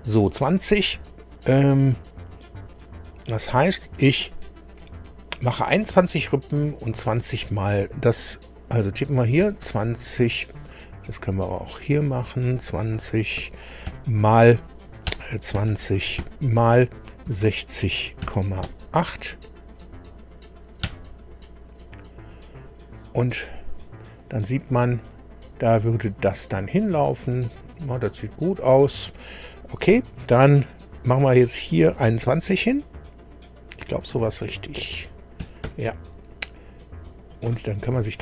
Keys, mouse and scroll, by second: 9.4 KP_2, 9.6 KP_0, 11.6 click, 15.1 BackSpace, 15.6 2, 15.7 KP_0, 17.3 6, 17.4 KP_0, 18.2 KP_Decimal, 18.7 KP_8, 20.9 KP_Enter, 25.1-25.4 scroll down 2, 31.1 click, 35.4 KP_2, 35.6 KP_1.